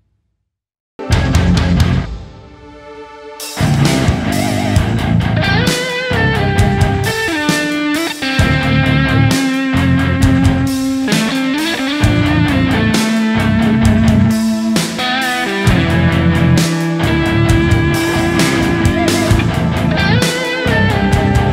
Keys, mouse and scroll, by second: 0.7 alt+click, 0.9 typing, 1.2 double click, 1.9 typing, 3.4 right click, 3.7 alt+click, 3.9 s, 4.1 double click, 4.8 alt+click, 5.7 alt+click, 6.4 alt+click, 7.3 right click, 8.4 right click, 8.7-9.2 typing, 9.4 alt+click, 11.1 alt+click, 11.1 alt+click, 13.2 alt+right click, 13.5 alt+right click, 16.1 alt+right click, 17.2 alt+click, 17.3-19.4 typing, 19.1 alt+right click, 20.9 alt+right click.